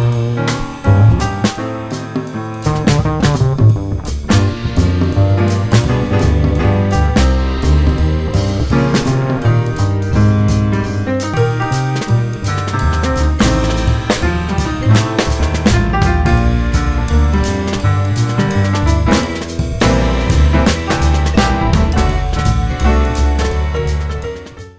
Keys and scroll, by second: 4.5 F4, 7.0 F4, 9.9 F4, 12.0 F4.